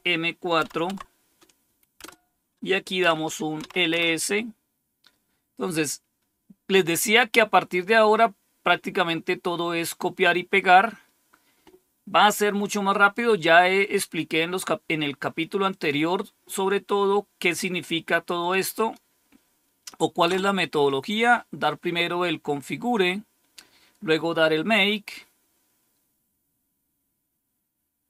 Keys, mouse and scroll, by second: 0.0-0.5 typing, 0.8 Tab, 1.9 Return, 2.7-3.5 typing, 3.8 Return, 7.2-7.8 scroll down 1, 10.1-13.1 drag, 13.7 right click, 15.6 click, 17.5 right click, 18.7 click, 19.2 click, 20.2 Return.